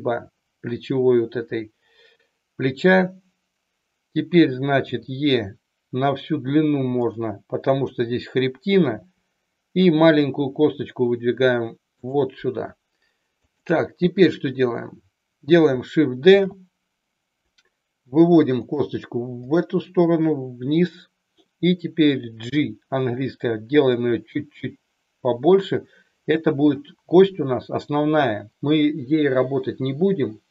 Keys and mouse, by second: 4.9 e, 6.9 click, 8.9 e, 12.0 click, 13.4 click, 16.3 shift+d, 18.5 click, 19.5 click, 22.4 g, 25.5 click.